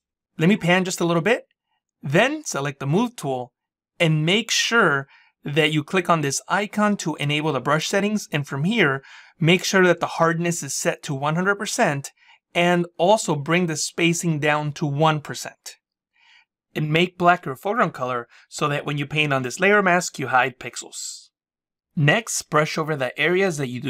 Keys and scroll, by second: 0.8 space.